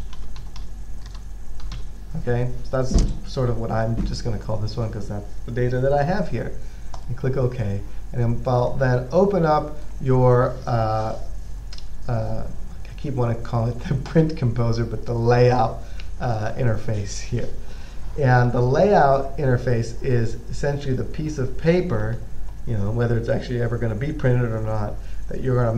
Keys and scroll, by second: 0.0-2.5 typing.